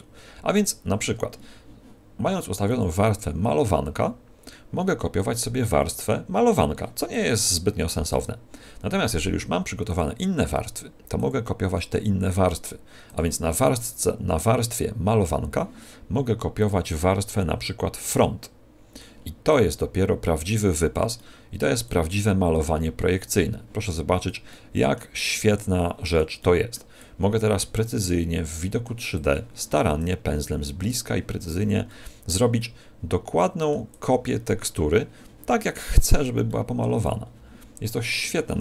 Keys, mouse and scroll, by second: 2.6 click, 7.1 click, 9.8 click, 10.5 click, 16.5 click, 19.5 click, 21.1 middle click, 21.8 click, 24.4 middle click, 25.1 click, 26.3 middle click, 26.9 click, 27.9-28.3 scroll up 3, 28.3 middle click, 29.1 click, 30.1 middle click, 30.8 click, 31.8 middle click, 33.9 click, 36.4 middle click, 37.0 click.